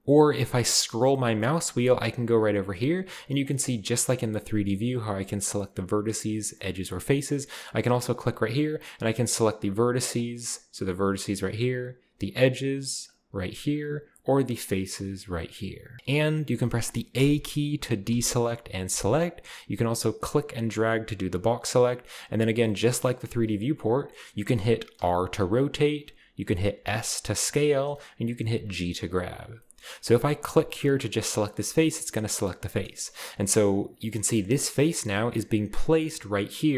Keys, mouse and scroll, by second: 0.7-1.0 scroll up 1, 1.0 scroll down 1, 1.2 scroll up 1, 1.4 scroll down 1, 7.7 click, 8.6 right click, 8.9 g, 9.0-10.1 right drag, 10.1 middle click, 10.2-10.8 drag, 10.8 middle click, 10.9 g, 11.1-12.2 right drag, 12.3-13.4 drag, 13.2-14.6 right drag, 13.2 g, 14.6 middle drag, 14.7 click, 15.3 middle click, 15.3 g, 16.0 a, 17.1 a, 18.1 a, 18.9 a, 20.2 click, 21.3-21.7 drag, 22.0 click, 24.9 r, 26.0 right click, 26.4-27.9 middle drag, 26.4-27.9 scroll down 1, 26.9 typing, 27.9 right click, 28.3 typing, 29.2-31.2 right drag, 29.6 shift+middle click, 31.6-32.7 shift+scroll up 1, 33.0-34.1 scroll up 1.